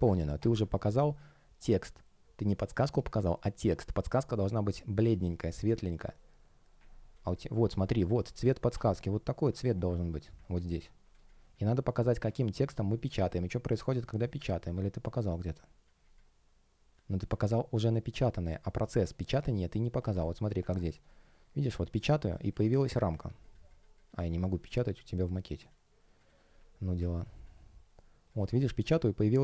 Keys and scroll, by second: 11.0 space, 20.5 super+\.